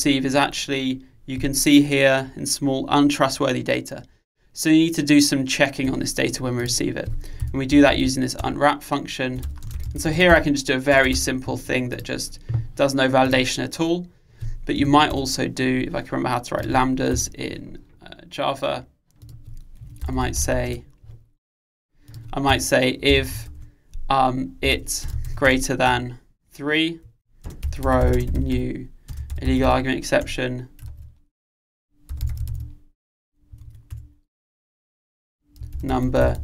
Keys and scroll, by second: 8.5 Return, 30.4 Return, 30.9 Return, 34.0 Return.